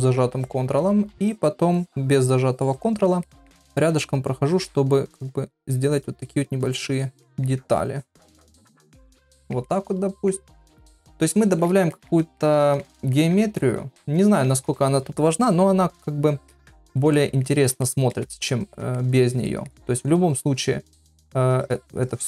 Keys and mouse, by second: 0.3 ctrl+click, 1.3 click, 1.7 click, 2.7 click, 3.2 middle click, 4.0 click, 4.4 click, 5.0 click, 5.7 click, 6.2 click, 6.7 click, 7.2 middle click, 7.9 click, 8.4 ctrl+middle click, 9.0 middle click, 9.3 ctrl+middle click, 9.7 middle click, 10.6 middle click, 11.4 shift+middle click, 11.9 ctrl+middle click, 12.4 middle click, 13.1 ctrl+middle click, 14.0 middle click, 16.5 middle click, 17.1 ctrl+middle click, 17.8 shift+middle click, 18.4 ctrl+middle click, 19.0 middle click, 19.5 ctrl+middle click, 20.4 shift+click, 20.9 shift+click, 21.2 shift+click, 21.6 shift+click, 22.0 shift+click.